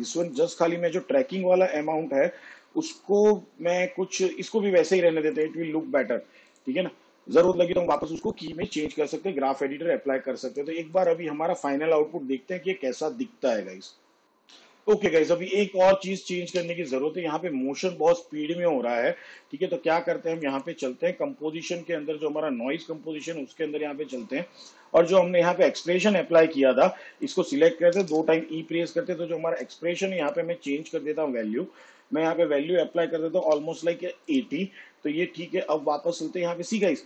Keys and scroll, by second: 18.1 space, 20.2 v, 29.2 e, 32.7 BackSpace, 34.7 8.